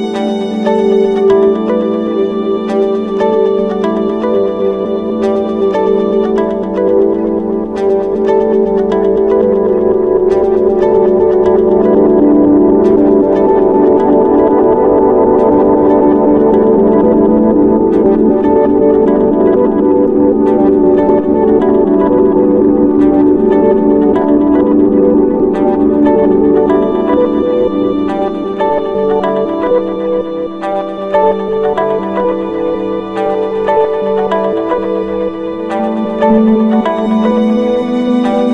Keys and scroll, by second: 9.1 ctrl+-, 10.1 ctrl+space, 14.2 ctrl+=, 22.8 ctrl+-, 23.7 ctrl+space.